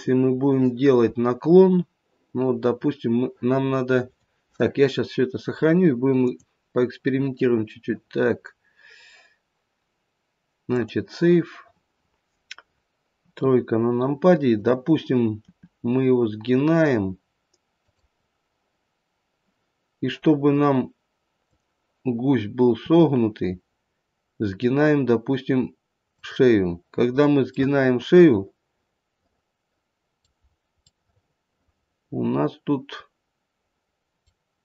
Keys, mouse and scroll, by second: 6.2 click, 13.1 KP_3, 14.4 click, 15.4 r, 21.4 click, 22.9 r, 27.5 middle click, 28.6 middle click, 30.4-30.8 scroll up 2, 30.8 middle click, 31.0 middle click, 33.6 middle click, 33.9 middle click.